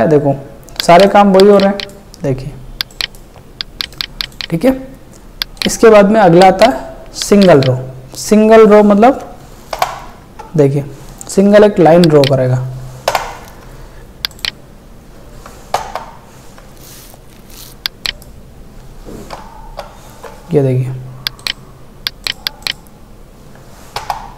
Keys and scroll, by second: 9.8 ctrl+BackSpace, 13.1 alt+BackSpace, 15.8 alt+BackSpace, 19.4 alt+BackSpace, 24.0 alt+BackSpace.